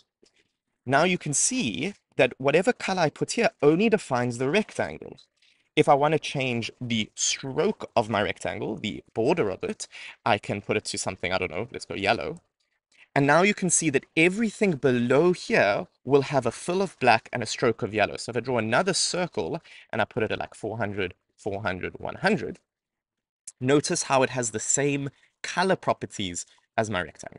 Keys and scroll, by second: 6.3 Return, 18.3 Return.